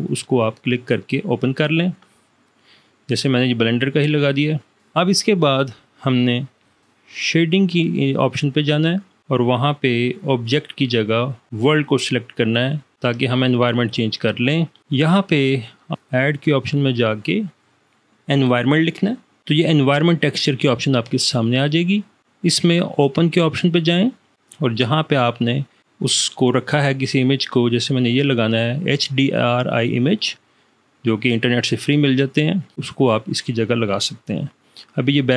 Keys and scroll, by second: 19.5 v.